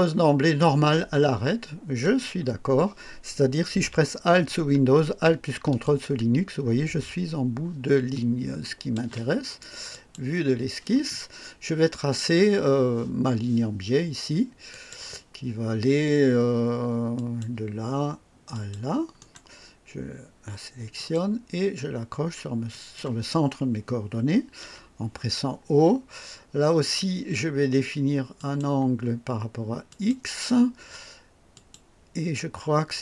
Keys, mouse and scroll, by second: 2.0 click, 5.8-9.1 drag, 9.9 click, 14.7 click, 17.1 click, 18.5 click, 19.2 right click, 20.9 click, 22.7 click, 24.6 o, 28.3 click, 29.8 click, 31.5 click.